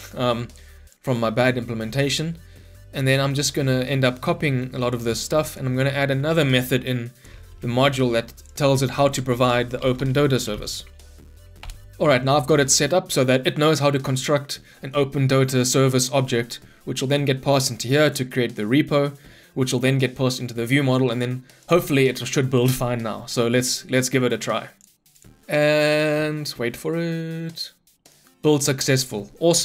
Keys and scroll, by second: 5.3 ctrl+c, 7.6 ctrl+d, 11.6 Return, 21.7 ctrl+F9.